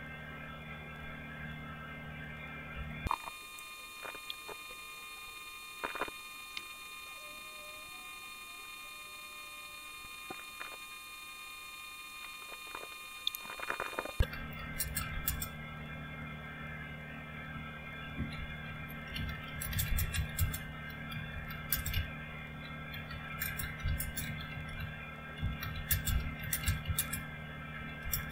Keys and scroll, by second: 5.6-6.3 typing, 10.3-11.1 typing, 12.2-15.6 typing, 17.3-28.3 typing.